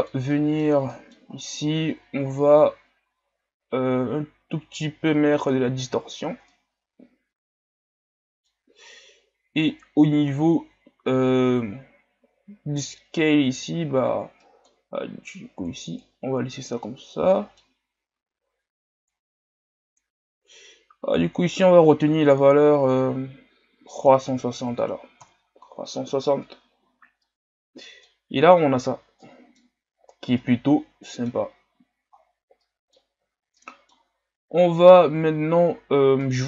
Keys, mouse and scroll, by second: 2.7-5.4 drag, 6.1-6.5 scroll up 4, 6.5-15.9 middle drag, 15.9-26.4 drag, 26.4-27.2 scroll down 8, 27.2-28.1 middle drag, 28.1-29.3 scroll up 2, 29.3-30.1 middle drag, 30.1 scroll down 1, 30.4-36.4 middle drag.